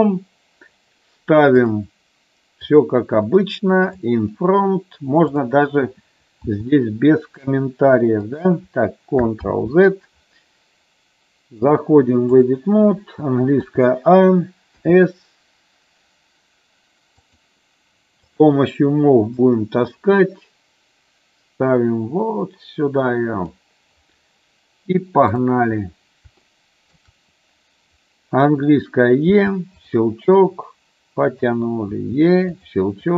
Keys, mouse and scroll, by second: 1.7 click, 2.8 click, 4.0 click, 5.4 click, 6.6 s, 8.4 click, 9.8 ctrl+z, 11.8 click, 13.8 a, 15.0 s, 17.4 click, 18.4 click, 19.6-23.7 drag, 26.7 shift+middle click, 29.4 e, 30.5 click, 32.2 e, 32.7 click.